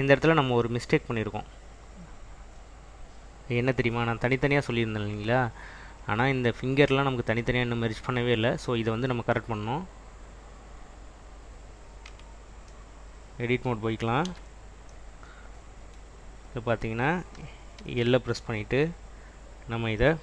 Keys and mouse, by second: 10.0 click, 10.6 click, 12.2 Tab, 14.4 /, 17.9 l.